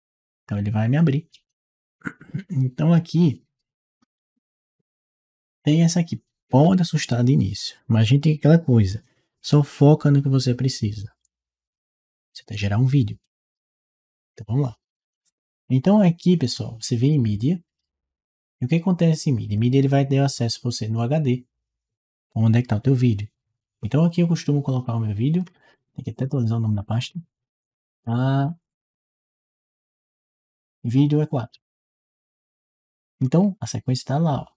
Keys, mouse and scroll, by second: 16.9 click, 24.5 click, 25.2-30.5 middle drag, 31.2 click.